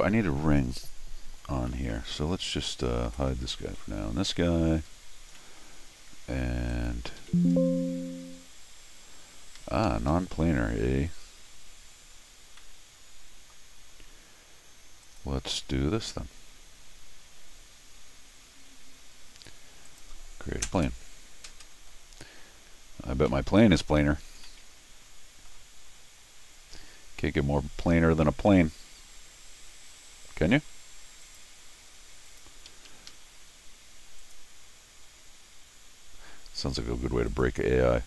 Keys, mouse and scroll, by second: 1.7 middle click, 3.1 Tab, 3.7 Tab, 4.8 scroll up 1, 5.4 middle click, 6.7 click, 7.2 c, 9.6 Escape, 9.9 Escape, 10.1 Escape, 12.6 middle click, 15.0 click, 19.9 ctrl+click, 23.3 c, 24.4 middle click, 31.2 click, 32.3 click, 32.7 Escape, 32.9 Escape, 33.1 Escape, 34.2 click, 37.3 click.